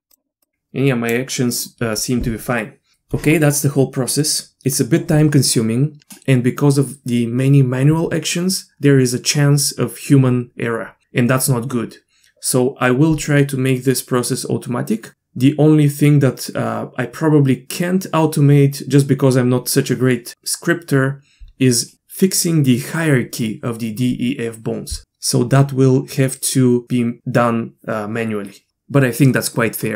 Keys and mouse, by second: 0.4-1.1 drag.